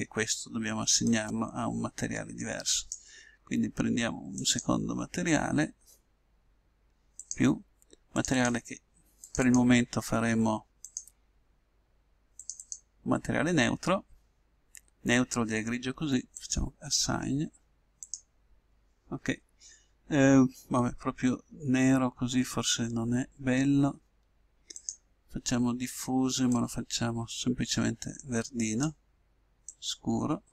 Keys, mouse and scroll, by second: 1.1-2.8 drag, 4.5-6.3 drag, 7.1-14.6 drag, 18.0-19.9 drag, 24.8-26.5 drag.